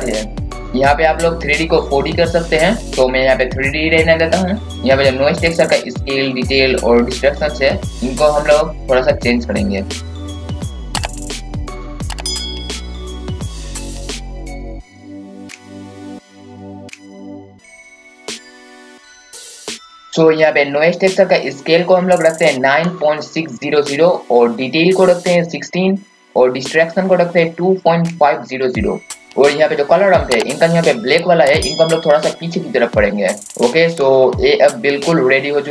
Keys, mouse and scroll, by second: 1.5-13.7 drag, 13.8-14.1 scroll up 1, 14.8-33.5 drag, 33.5-34.5 scroll up 1, 34.5-35.5 scroll down 1.